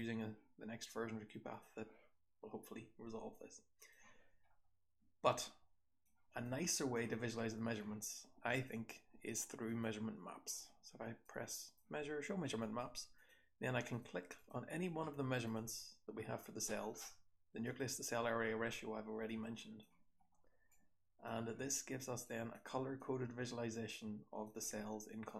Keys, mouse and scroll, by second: 4.7-7.2 scroll down 4, 5.3-6.0 drag, 6.4-6.9 drag, 7.2-10.2 scroll up 3, 8.5 click, 18.8-22.2 scroll down 2, 19.3 click, 20.7 click, 25.2-25.3 drag.